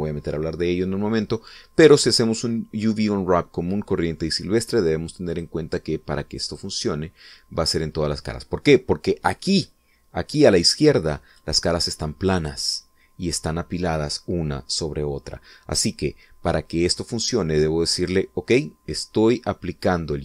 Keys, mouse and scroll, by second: 6.5 click, 7.7 click.